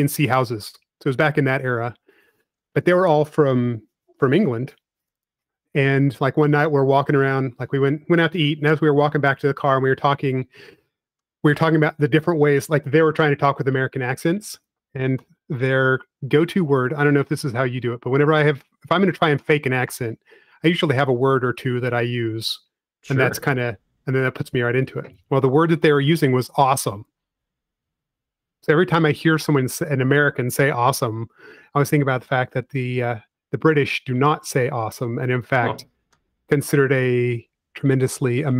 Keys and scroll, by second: 3.8-5.0 typing, 6.7 p, 9.4 space, 11.8 |, 16.3-17.4 typing, 19.3 typing, 23.1 space, 24.7 m, 31.5-34.0 typing, 36.3 space, 37.3 m.